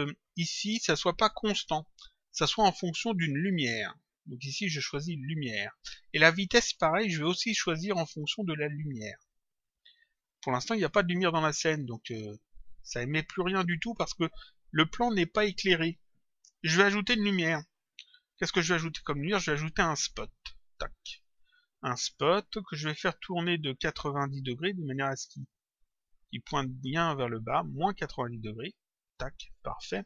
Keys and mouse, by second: 2.4 click, 4.1 click, 7.8 click, 8.9 click, 10.8 click, 14.3 click, 18.3 click, 22.0 click, 24.2 click, 25.8 click.